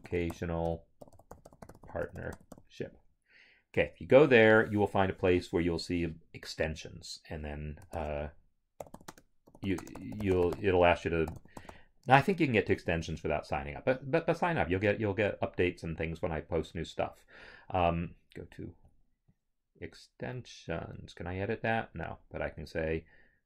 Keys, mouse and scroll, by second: 0.0-2.5 typing, 3.7 Return, 7.9-12.1 typing, 12.7 Return, 19.3 click.